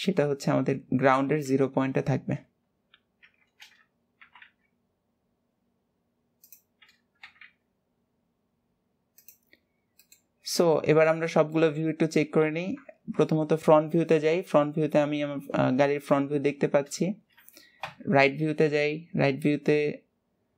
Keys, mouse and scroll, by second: 3.1 shift+middle click, 3.9 scroll up 2, 4.3 g, 9.7 scroll down 5, 11.0 middle click, 11.7 middle click, 12.6 KP_1, 14.5 scroll up 2, 16.4-16.8 scroll down 2, 18.0 KP_3.